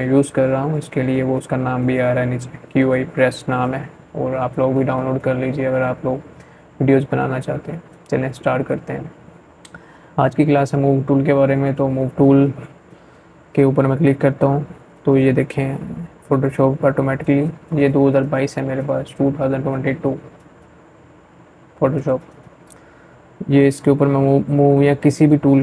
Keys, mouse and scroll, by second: 0.6 right click, 0.7 right click.